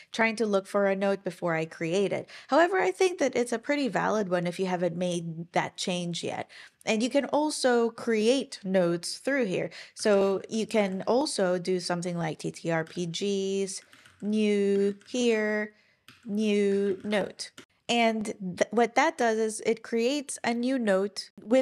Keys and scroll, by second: 9.7-11.2 typing, 12.5-17.6 typing.